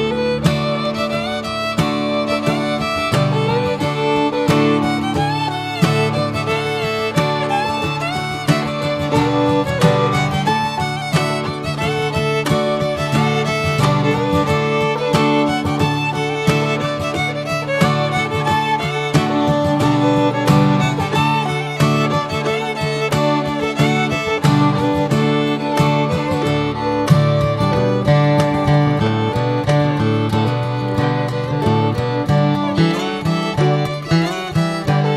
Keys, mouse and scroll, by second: 0.2 click, 0.4-1.1 right drag, 1.1 Tab, 1.4-3.0 middle drag, 3.0 ctrl+r, 4.0-5.5 middle drag, 5.5 2, 6.0-10.8 middle drag, 10.8 ctrl+b, 14.1 scroll down 3, 14.3 middle click, 14.8 Tab, 15.0 drag, 15.3-16.0 middle drag, 16.0 scroll down 1, 16.2-17.0 middle drag, 17.0 scroll up 1, 17.3 click, 17.5 Tab, 17.9 alt+middle click, 18.2 alt+middle click, 18.5 alt+z, 18.7 scroll up 4, 19.1 shift+middle click, 19.5-20.0 shift+scroll up 3, 20.4 1, 20.6 scroll up 2, 21.0 shift+middle click, 21.7 click, 22.3 click, 23.9 click, 24.7 click, 26.0 click, 26.7 click, 28.2 click, 34.2 click.